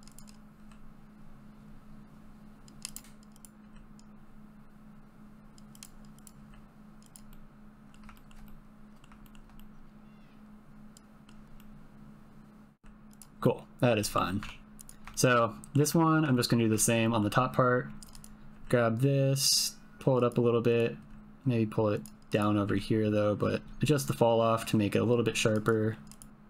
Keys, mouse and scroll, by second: 0.0-0.5 typing, 0.1 click, 0.3 click, 1.9 g, 2.1 click, 2.5 g, 3.1 click, 4.1 click, 4.2 g, 4.4 shift+middle click, 4.8 click, 5.1 middle click, 5.2 click, 5.6 middle click, 6.2 click, 6.4 g, 6.7 click, 7.0 click, 7.1 g, 7.4 click, 7.6 Tab, 7.8 shift+click, 8.3 click, 8.6 click, 8.7 click, 9.0 g, 9.8 g, 10.2 g, 10.8 middle click, 11.0 shift+middle click, 11.2 click, 11.3 g, 11.6 click, 11.9 g, 12.1 g, 12.4 click, 12.5 click, 12.6 Tab, 12.7 click, 13.4 middle click, 14.0 middle click, 14.4 Tab, 15.1 shift+click, 15.4 click, 15.8 middle click, 15.8 Tab, 16.3 ctrl+middle click, 16.7 shift+middle click, 17.0 click, 18.1 click, 18.5 g, 20.7 click, 20.9 g, 22.4 click, 22.6 g, 25.5 click, 26.3 g.